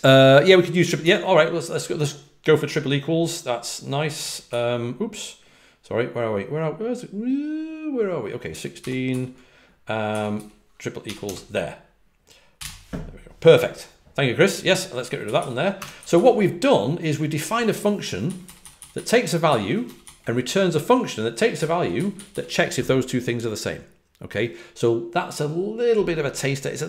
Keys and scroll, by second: 1.0 Escape, 4.1 9, 4.4 j, 8.2-11.2 typing, 12.2-13.1 typing, 14.7-16.6 typing, 18.2-19.4 typing.